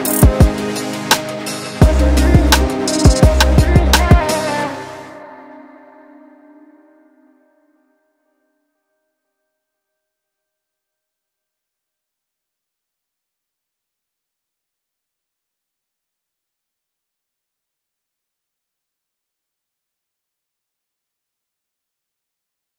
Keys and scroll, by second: 0.4 2, 2.8 f, 12.0 4, 18.5 2, 18.9 ].